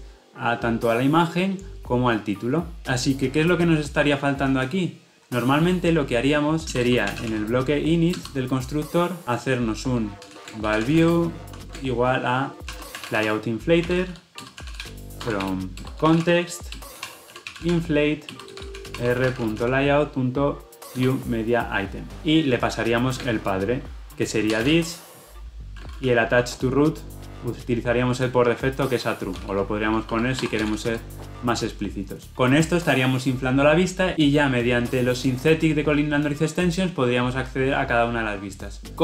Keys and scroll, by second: 10.9 Return, 14.4 Return, 26.1 ctrl+p, 30.8 Escape.